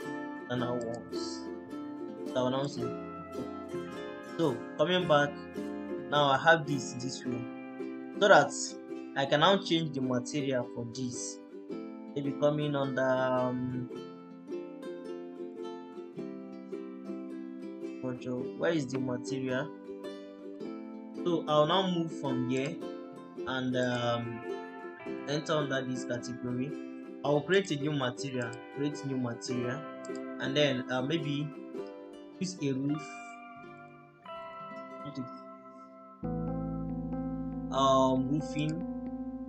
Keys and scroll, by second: 2.2 Delete.